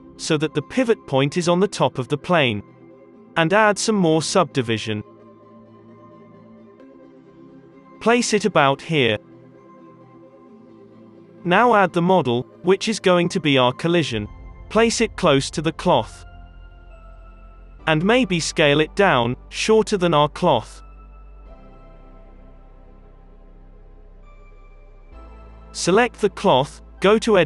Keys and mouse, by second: 0.2 g, 1.5 g, 2.4 alt+a, 3.0 g, 3.4 Tab, 5.7 Tab, 6.9 KP_3, 7.4 g, 8.3 alt+a, 10.6 g, 11.7 alt+a, 12.4 click, 12.5 KP_1, 14.4 ctrl+z, 14.4 s, 14.4 KP_3, 14.4 g, 16.0 shift+s, 18.1 shift+s, 19.0-20.7 drag, 20.2 s, 21.0-22.4 drag, 21.5 s, 23.0 s, 23.7 alt+a, 25.4 KP_1, 26.2 Tab.